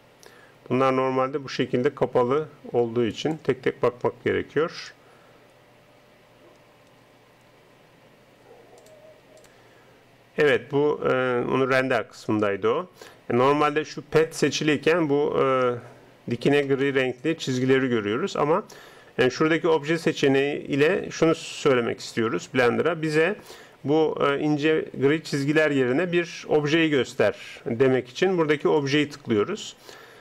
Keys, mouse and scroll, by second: 16.9-18.6 middle drag, 28.6-30.2 drag.